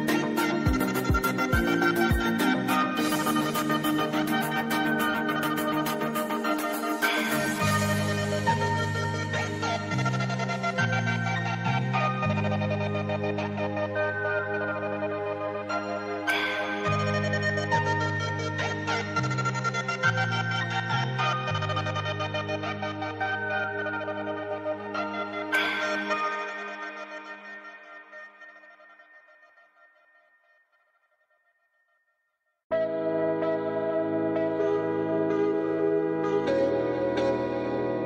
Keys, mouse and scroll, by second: 1.5 scroll up 1, 2.3-6.2 drag, 10.9 super+scroll up 1, 11.9 click, 15.1 Down, 17.0 click, 20.2 v, 20.5 click, 21.5-22.4 click, 24.0 a, 24.5-25.7 drag, 27.5-28.6 drag.